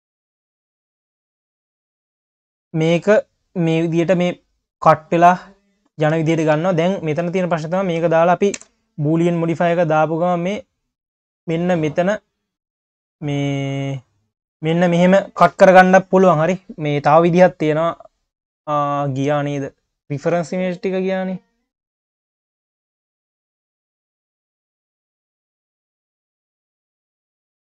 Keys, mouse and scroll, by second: 0.0 click, 0.8 click, 2.0-3.3 drag, 5.3 q, 6.2 q, 7.7 shift+click, 8.5 ctrl+KP_Add, 9.8 click, 10.4 q, 12.4-13.1 drag, 13.1-13.6 scroll up 4, 14.7 q, 15.3-16.8 scroll up 1.